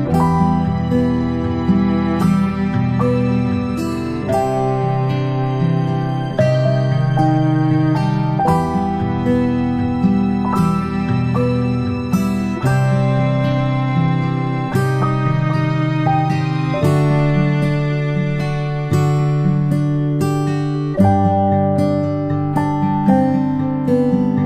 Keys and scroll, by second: 12.6-13.0 ctrl+space, 17.7 a.